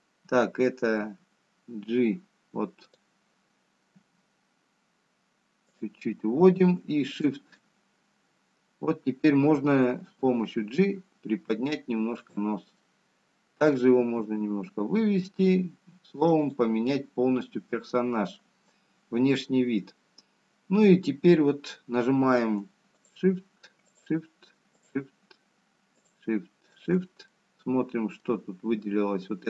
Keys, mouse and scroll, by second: 1.5 click, 3.3 g, 6.2 g, 8.9 shift+click, 12.2 g, 15.4 middle click, 16.4 g, 19.8 middle click, 21.7-22.1 scroll down 1, 22.6-23.2 scroll up 1, 25.4 shift+click.